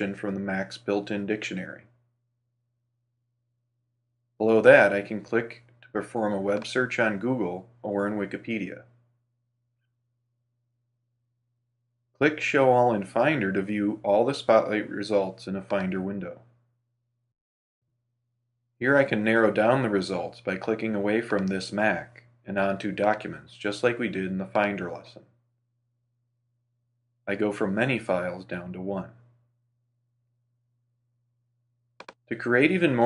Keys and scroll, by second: 9.6 super+w, 11.4 super+space.